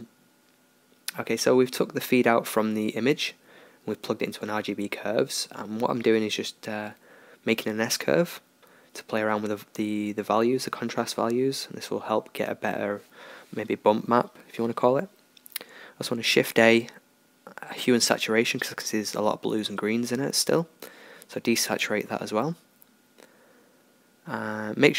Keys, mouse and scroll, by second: 5.4-9.0 drag, 9.7-11.2 drag, 14.8 shift+a.